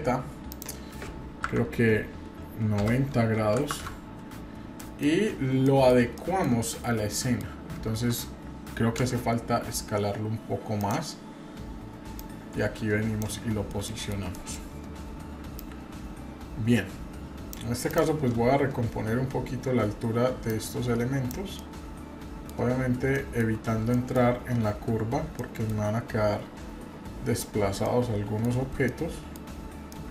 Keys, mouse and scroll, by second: 0.5-4.4 drag, 4.8 middle drag, 5.0 scroll down 1, 5.3 scroll up 1, 5.3 scroll down 1, 5.6 middle drag, 6.2-6.5 shift+middle drag, 6.8 scroll down 1, 7.1 middle click, 7.5-9.0 scroll up 1, 9.0 s, 12.2-13.2 drag, 13.3-13.7 scroll up 2, 13.9 shift+middle click, 14.3 middle click, 15.6-17.5 drag, 17.9 click, 19.4-20.5 scroll down 1, 20.5 click, 21.5-22.5 middle drag, 22.8 scroll up 1, 23.2-23.5 shift+middle drag, 23.5 scroll up 2, 23.9-24.3 shift+middle drag, 24.5-25.0 scroll up 2, 25.4-25.9 shift+middle drag, 26.7-27.8 scroll down 4, 27.8-28.4 middle drag, 28.6 scroll up 1, 28.8 middle click, 29.9 middle drag.